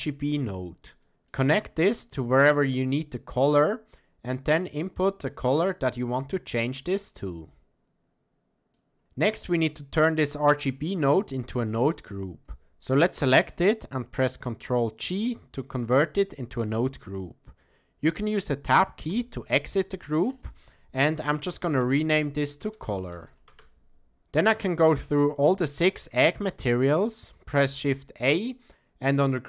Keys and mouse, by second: 2.0-5.3 drag, 9.9-12.1 drag, 15.0 ctrl+g, 15.7 middle click, 19.1 Tab, 20.5-24.2 drag, 25.6 click, 27.3 shift+a.